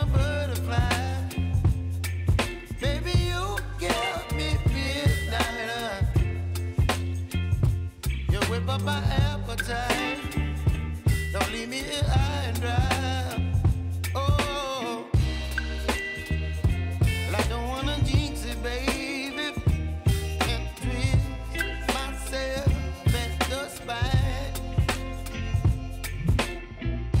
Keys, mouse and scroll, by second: 6.1 click, 10.1-14.0 drag, 14.0 ctrl+r, 15.5-17.6 drag, 17.6 space, 20.2-27.2 drag.